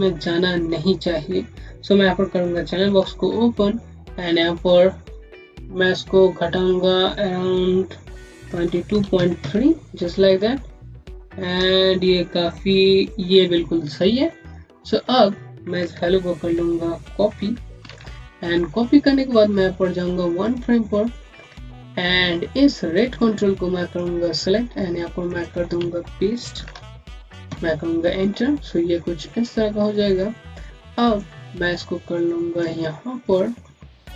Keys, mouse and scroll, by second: 2.8 alt+c, 4.1 click, 11.0 scroll up 1, 12.4 scroll down 1, 17.7 c, 20.3 click, 20.9 scroll down 1, 21.3 scroll up 1, 22.8 scroll up 1, 23.0 click, 27.3 KP_Enter, 31.0 KP_Enter, 31.2 click, 32.8 scroll up 1, 33.2 alt+middle click, 33.7 scroll up 1.